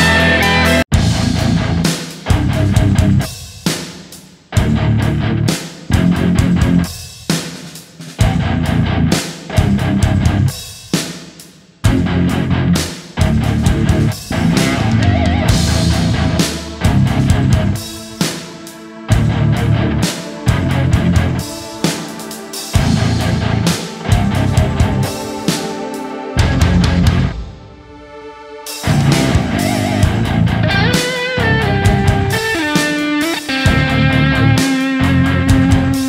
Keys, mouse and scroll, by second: 27.7 right click, 29.7 right click.